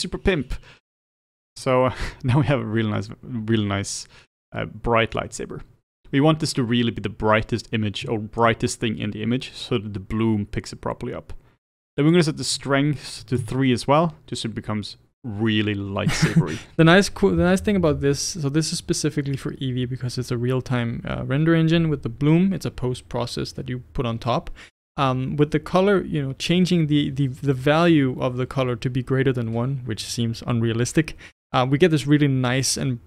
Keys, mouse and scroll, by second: 1.6-13.5 middle drag, 13.5-15.5 drag.